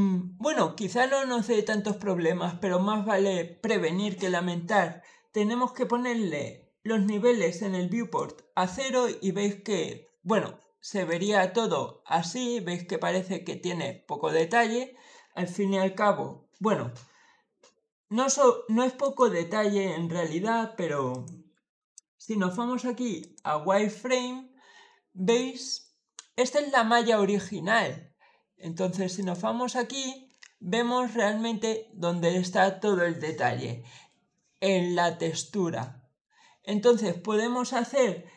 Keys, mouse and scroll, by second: 1.6 click, 6.9-8.0 drag, 10.9 click, 12.1-12.6 scroll down 2, 14.2 click, 18.9 click, 21.0 click, 23.1 click, 25.1 click, 29.0 click, 30.3 scroll down 1, 30.7 scroll up 1, 32.1-33.6 scroll down 2, 33.6 scroll up 1, 33.6-34.4 scroll down 1, 34.4-35.0 scroll down 1, 35.7-36.8 middle drag.